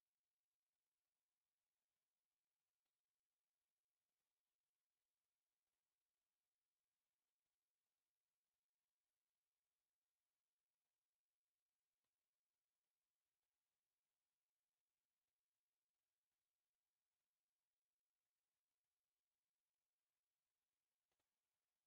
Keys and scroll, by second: 0.5 Escape, 12.4 Escape, 13.3 space, 15.0 0, 15.8 Escape, 18.4 Escape, 19.6 s, 19.7 space, 20.2 Escape.